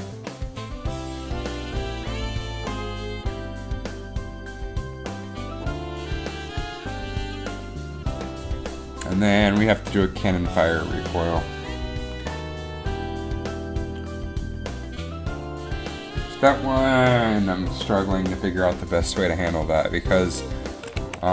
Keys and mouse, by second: 21.1 a.